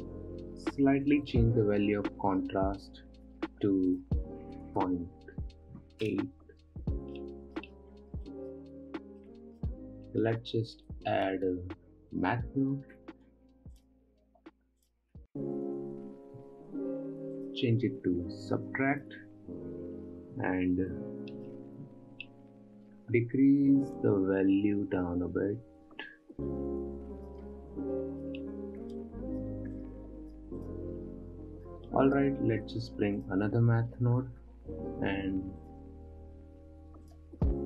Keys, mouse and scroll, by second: 1.7-7.4 shift+drag, 7.6-8.2 middle drag, 8.2-8.8 scroll down 1, 8.8-11.2 middle drag, 11.2 shift+a, 17.8-20.9 drag, 24.5-27.5 drag, 28.5-29.0 middle drag, 29.0-29.4 scroll down 2, 29.4-31.1 drag, 32.1 scroll down 2, 32.3 middle click, 33.1 shift+a.